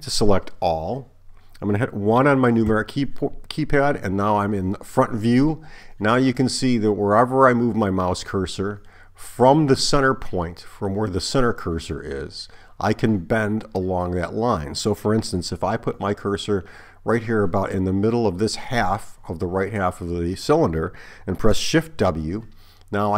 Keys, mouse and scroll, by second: 2.7 KP_1, 22.0 shift+w.